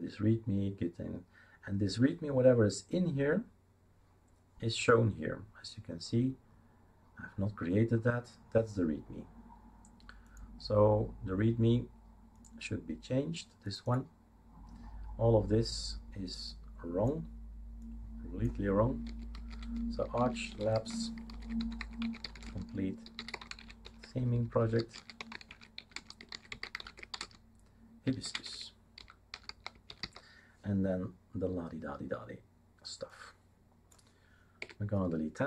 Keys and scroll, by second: 19.1-30.5 typing, 34.6 Delete.